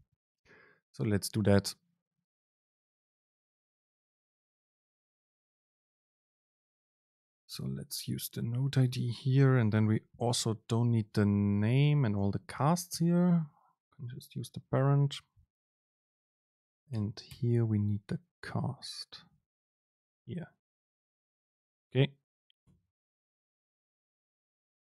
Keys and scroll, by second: 3.7 BackSpace, 10.4 BackSpace, 11.3 Down, 12.0 Right, 12.2 ctrl+shift+super+Left, 12.6 BackSpace, 13.8 BackSpace, 13.8 super+space, 16.4 BackSpace, 22.7 ctrl+shift+super+F9.